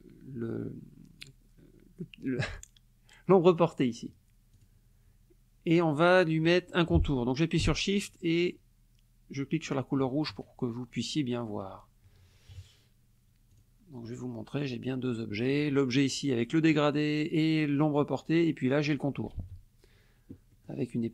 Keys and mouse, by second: 4.5 click, 9.7 shift+click, 12.5 KP_Subtract, 13.5 click, 14.2-15.1 drag, 15.5 click, 18.9 click, 19.4 ctrl+z, 20.5 click.